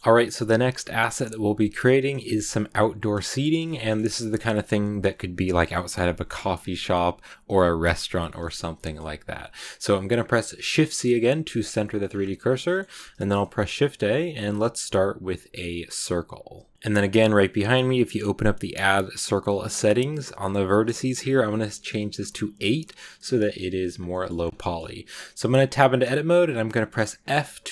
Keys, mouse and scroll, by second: 9.1 scroll down 2, 9.6 click, 10.4 shift+c, 11.4 middle click, 12.0 shift+scroll up 2, 12.5 shift+middle click, 12.9 shift+a, 16.7-18.6 middle drag, 18.6-21.9 drag, 22.8 click, 23.3 middle click, 23.8 scroll down 2, 24.0 middle click, 24.2 scroll up 2, 24.4 middle click, 25.2 Tab, 26.5 scroll up 1, 26.5 middle click, 27.1 f.